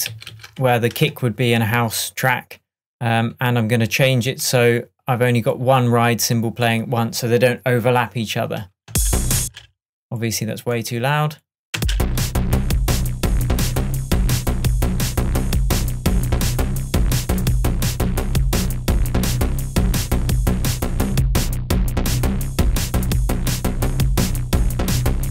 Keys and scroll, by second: 0.2 super+d, 1.0 shift+super+Tab, 8.9 space, 11.8 space.